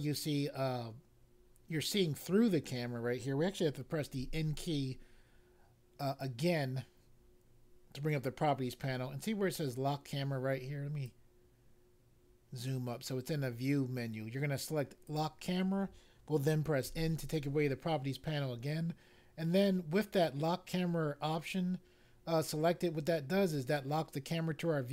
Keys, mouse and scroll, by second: 4.1 n, 11.0 click, 15.0 click, 16.8 n.